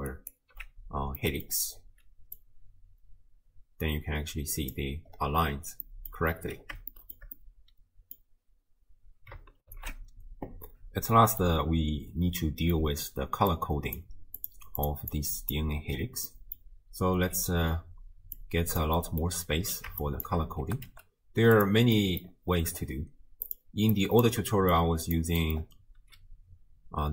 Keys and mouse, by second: 0.3 ctrl+alt+click, 1.2 middle click, 2.4-4.8 drag, 6.0 middle click, 6.9 shift+drag, 7.4-8.2 middle drag, 9.7 ctrl+alt+shift+q, 11.5-12.8 middle drag, 13.5-14.1 drag, 14.4 click, 14.8 click, 15.1 click, 16.3 middle click, 18.6-18.9 drag, 19.0 middle click, 20.1 shift+drag, 20.6 g, 22.0 middle click, 23.5 click, 24.0 click, 24.7 click, 25.4 middle click.